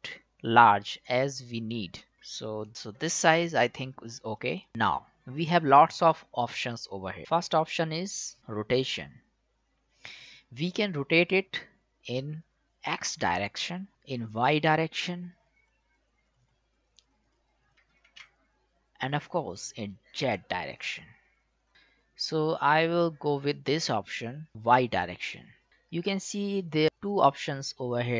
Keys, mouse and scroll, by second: 4.3 click, 8.8 click, 11.4-13.9 drag, 14.3-16.3 drag, 19.8-22.6 drag.